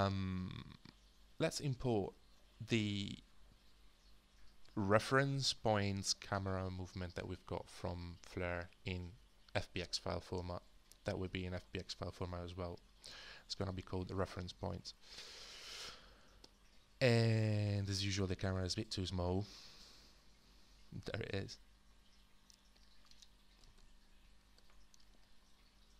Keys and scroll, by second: 0.0-25.9 typing, 24.5 Return.